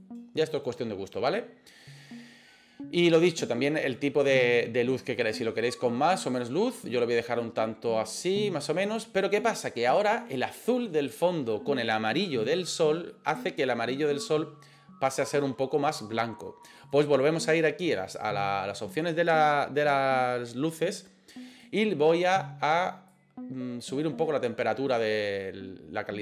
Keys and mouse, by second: 16.9 click.